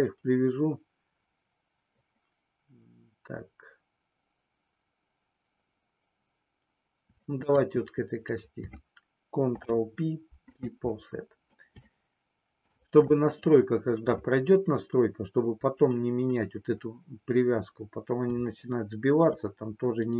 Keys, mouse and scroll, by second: 9.4 ctrl+p, 11.9 shift+middle click, 18.5 shift+middle click.